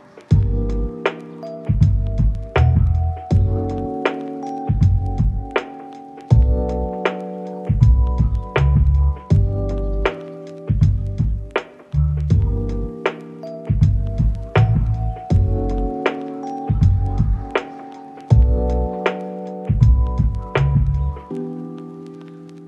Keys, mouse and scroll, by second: 0.0 shift+middle click, 2.0-3.9 typing, 4.5 double click, 10.7-11.7 scroll up 1, 11.9 right click, 14.1 2, 14.2 0, 14.2 Return, 15.0 middle click, 18.6 double click, 20.0 ctrl+middle click.